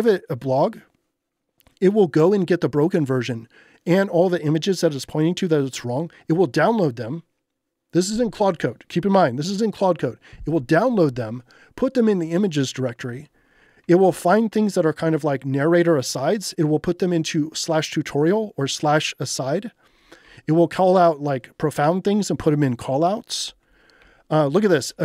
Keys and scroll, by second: 13.8 j, 20.2 j, 24.0 j.